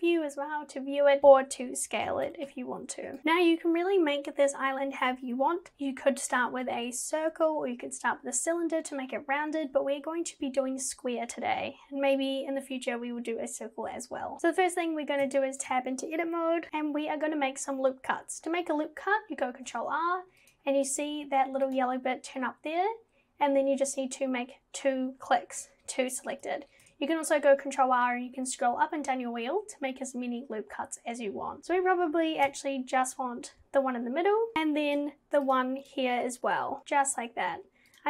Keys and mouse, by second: 1.3 KP_1, 2.1 g, 15.3 Tab, 19.6 ctrl+r, 26.7 ctrl+r, 34.9 ctrl+r, 37.9 click.